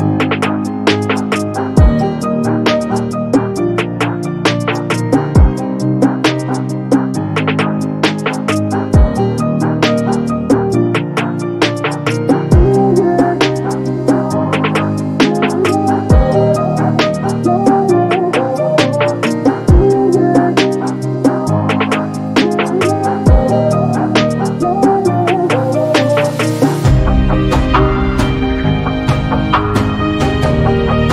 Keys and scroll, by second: 2.2 b, 27.1 1, 28.6 0, 28.8 KP_Decimal, 29.0 2.